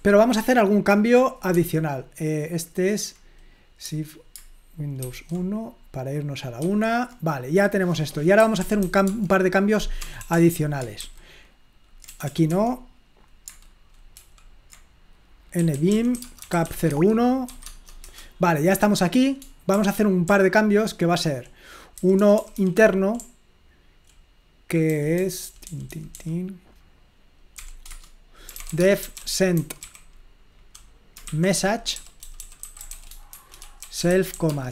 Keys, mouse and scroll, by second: 0.0 super+1, 1.6 super+2, 5.1 super+!, 6.7 super+1, 8.2-10.3 typing, 11.0 super+h, 12.1 BackSpace, 12.3 BackSpace, 12.5 Escape, 14.2 super+l, 15.3-17.5 typing, 17.6 Tab, 18.0 Return, 20.3-26.2 typing, 27.6-34.7 typing.